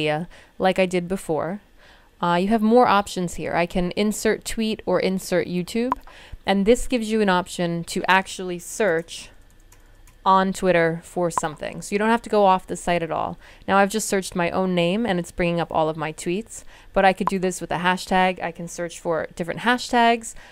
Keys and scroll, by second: 8.6-10.5 typing.